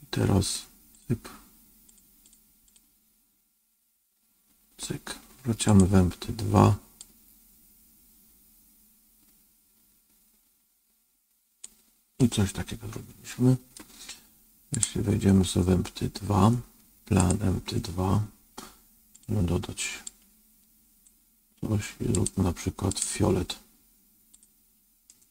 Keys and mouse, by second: 0.9 click, 2.2-5.7 drag, 6.9-11.5 drag, 12.1-13.6 middle drag, 14.7 click, 17.1 click, 19.1-21.0 drag, 22.0 click, 24.3 click, 25.0 middle click.